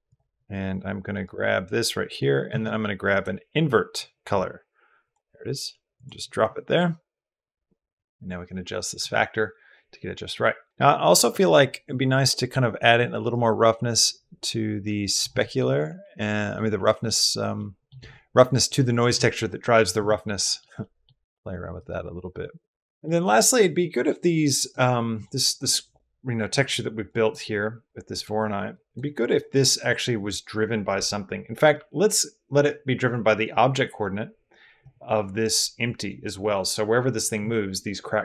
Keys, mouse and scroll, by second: 1.0 click, 1.1 click, 2.3 shift+a, 11.2 middle click, 13.1 click, 15.2 middle click, 15.8 middle click, 16.6 middle click, 17.4 middle click, 20.2 middle click, 20.6 middle click, 21.0 middle click, 21.6-22.9 middle drag, 23.0 middle click, 23.9 middle drag, 24.4 click, 27.0 click, 27.7 click, 28.6 click, 29.2 click, 32.6-34.7 drag.